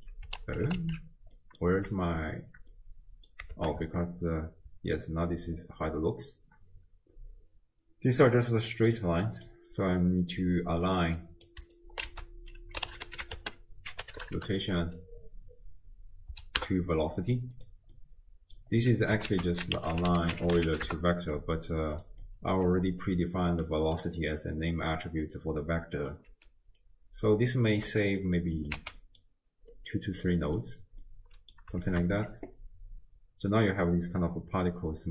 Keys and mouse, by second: 0.4 alt+q, 0.8 alt+q, 1.4 middle click, 2.8 click, 3.0 middle click, 3.5 shift+space, 4.8 space, 5.0 right drag, 5.2-8.3 middle drag, 8.9 middle click, 10.1 click, 10.9-11.5 drag, 12.1 ctrl+a, 17.9 middle click, 19.4 ctrl+a, 22.2 middle click, 23.1 click, 23.1-23.9 d, 25.0 d, 25.3 click, 26.2 d, 26.3 d, 26.4 d, 26.9 click, 27.8 d, 27.9 middle click, 28.6 click, 28.8 x, 29.1 middle click, 29.1 click, 29.1 right click, 29.8-30.7 drag, 31.2 click, 31.2 middle click, 31.2 right click, 31.9 shift+space.